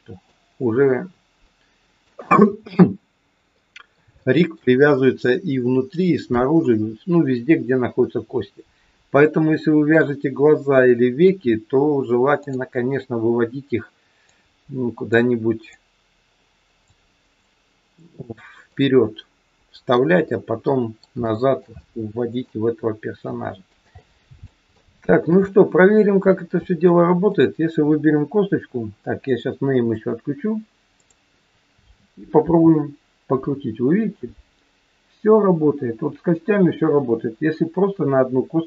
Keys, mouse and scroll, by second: 1.4 middle click, 4.2 shift+middle click, 7.8-9.1 scroll up 2, 9.1-9.4 scroll down 1, 9.4 middle click, 12.4 click, 14.2 click, 17.4 click, 18.7 middle click, 20.7 middle click, 21.2 shift+middle click, 21.7 middle click, 23.3 middle click, 24.7 shift+middle click, 24.7 shift+scroll up 1, 24.9 shift+middle click, 25.4 middle click, 27.3 click, 28.3 scroll up 1, 29.8 click, 30.9 click, 32.3 r.